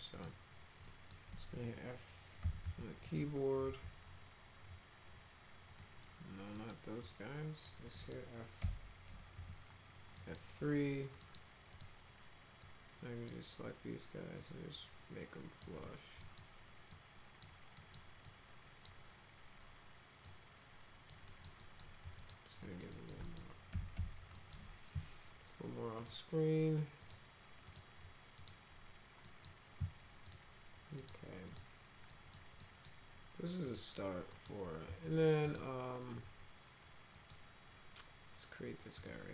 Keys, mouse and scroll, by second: 0.1 click, 0.8 middle click, 2.2-3.7 typing, 3.0 middle click, 5.8 middle click, 6.6 middle click, 7.0 click, 8.0 right click, 8.6 F3, 9.1 F3, 9.4 F3, 10.2 right click, 11.2 right click, 11.7 click, 12.7-13.3 drag, 14.4-15.6 drag, 15.8 middle click, 16.2 middle click, 16.9 middle click, 17.8 middle click, 18.3 click, 20.3 click, 21.3 middle click, 21.6 middle click, 22.2 click, 22.6 middle click, 22.9 middle click, 23.3 middle click, 23.7 F3, 24.0 F4, 24.4 middle click, 26.0 click, 27.0 click, 27.7 click, 28.4 click, 29.3 middle click, 30.3 click, 31.0 click, 31.5 click, 32.1 middle click, 32.6 middle click, 33.7 click, 34.3 middle click, 35.0 middle click, 35.5 click, 37.1 middle click, 39.0 click.